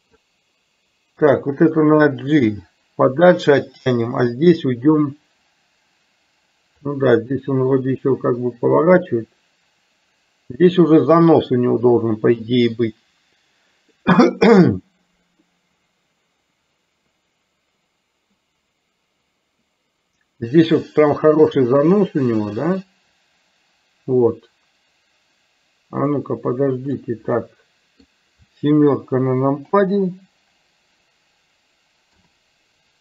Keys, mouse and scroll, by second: 1.3 click, 2.6 g, 6.9-27.2 drag, 27.4 middle click, 29.7 KP_7.